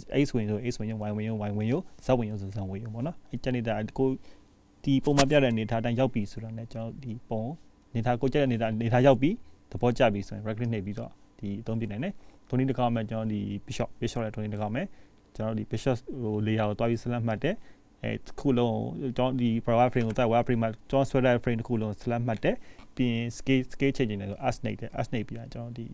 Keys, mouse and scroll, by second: 22.4-23.4 scroll down 2, 23.5 shift+middle click, 24.7-25.7 scroll up 1.